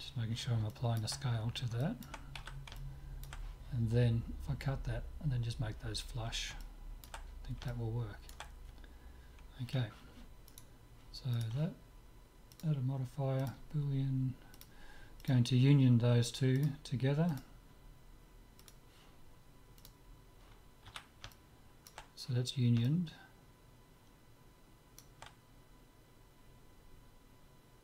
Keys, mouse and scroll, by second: 0.8-4.8 middle drag, 2.4 z, 6.6-10.6 middle drag, 10.6-13.2 right drag, 12.6-14.3 drag, 14.6-16.3 drag, 16.6-18.3 drag, 18.7-20.3 drag, 20.5 click, 20.9 z, 21.4-24.9 middle drag.